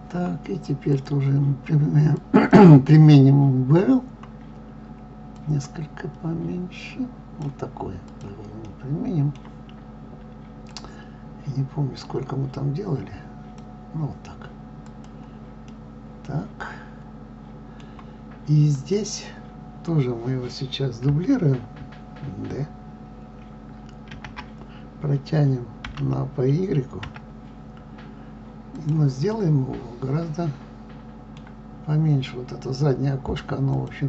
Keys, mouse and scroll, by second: 2.4-8.6 drag, 8.6-11.8 middle drag, 11.8-14.9 drag, 15.5-18.8 middle drag, 18.8 click, 24.1 shift+d, 29.1-33.5 middle drag, 33.5 click.